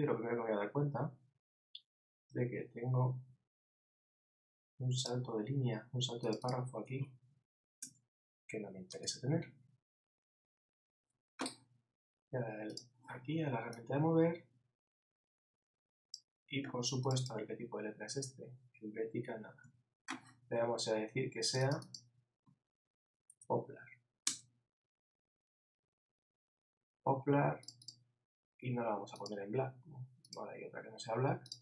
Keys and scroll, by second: 19.6 super+a.